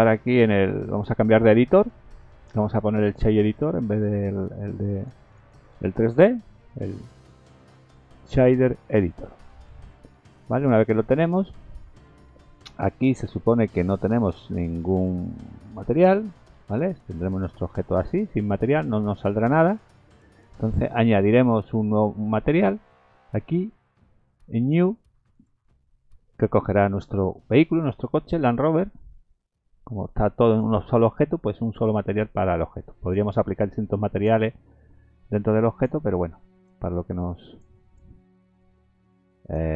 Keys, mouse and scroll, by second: 5.8 n, 7.3 click, 10.3-10.6 scroll down 5, 13.6 click, 14.9 click, 16.2 click, 17.6-18.0 scroll down 4, 18.7 scroll down 1, 24.6 click, 25.3 click, 28.1-29.3 scroll up 18, 30.0 click, 30.8-31.5 scroll down 8, 32.5 click, 33.7 click, 35.7 click, 36.5 click, 36.9 click, 37.9 click, 38.6 click.